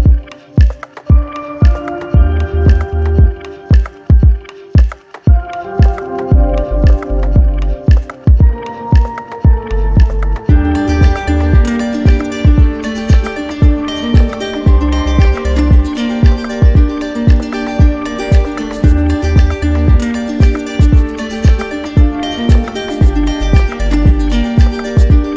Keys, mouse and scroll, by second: 0.3-1.4 drag, 2.8-4.0 drag, 4.2-5.4 drag, 6.2 alt+click, 6.7 click, 9.8 click, 10.4 click, 10.9 click, 11.6 click, 13.1 q, 20.4 click, 21.0 click, 22.9 click, 24.0 click, 24.5 shift+click.